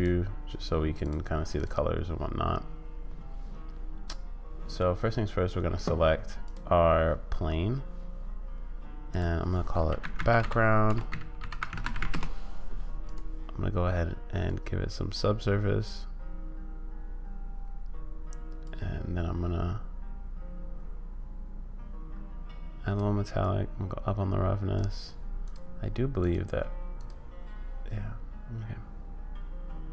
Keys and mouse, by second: 1.0 click, 1.5 click, 6.4 click, 9.2-12.7 drag, 14.5 click, 18.7-23.0 drag, 23.5-24.8 drag, 25.5-29.9 drag.